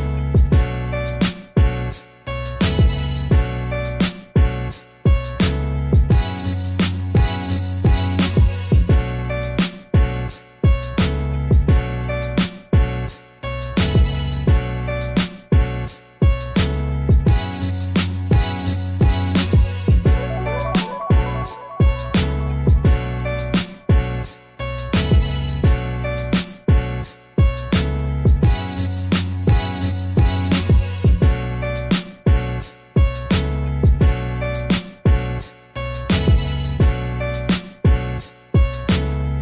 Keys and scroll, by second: 0.2 ctrl+d, 1.4 ctrl+z, 2.3 ctrl+d, 2.7 ctrl+d, 3.2 ctrl+d, 4.0 ctrl+d, 4.3 ctrl+d, 4.7 ctrl+d.